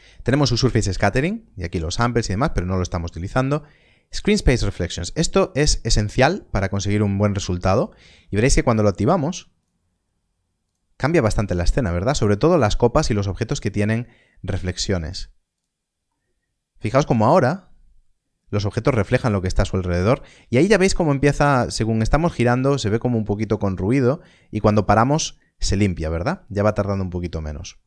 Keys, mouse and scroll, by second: 9.6 click, 14.8 click, 16.0 middle click, 26.8 middle click.